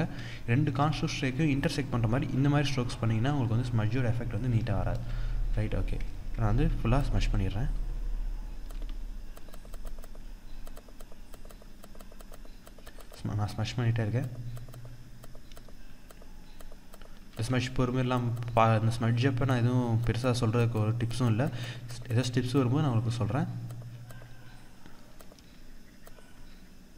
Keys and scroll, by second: 4.6 ctrl+z.